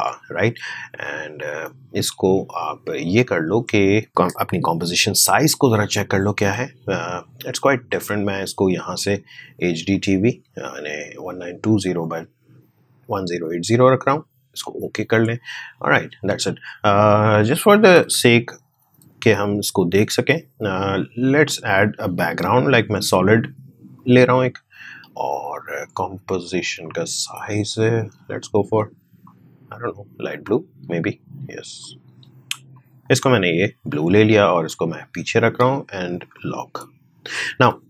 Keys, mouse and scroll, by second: 1.1-5.2 drag, 5.2 ctrl+k, 7.8 click, 7.8-16.8 drag, 17.8-20.1 drag, 20.1 right click, 21.2-36.3 drag.